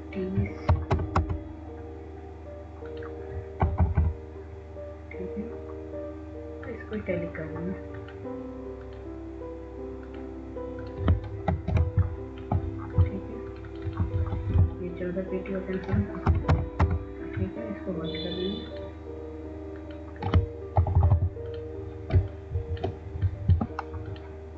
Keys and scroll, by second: 0.2 ctrl+alt+c, 1.0 ctrl+a, 3.2-4.2 typing, 6.1-6.8 typing, 14.3-15.2 w, 15.4 w, 17.1 ctrl+a, 18.8-19.7 typing, 23.9 Up.